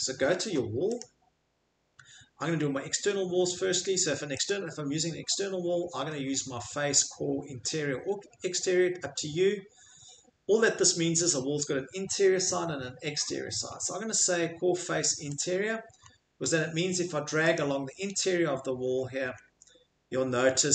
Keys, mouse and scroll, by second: 1.0 click, 4.5 click, 15.4 click, 16.0-16.4 scroll, 17.6 click, 17.6 scroll, 19.4-19.8 scroll.